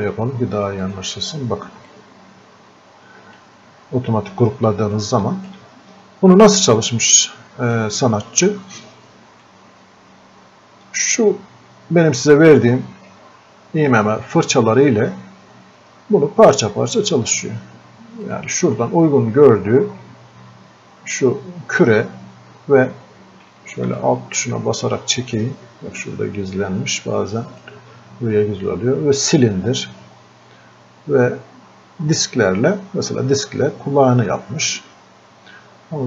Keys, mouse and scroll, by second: 7.8-11.8 drag, 16.5-18.2 drag, 24.0-36.0 alt+drag.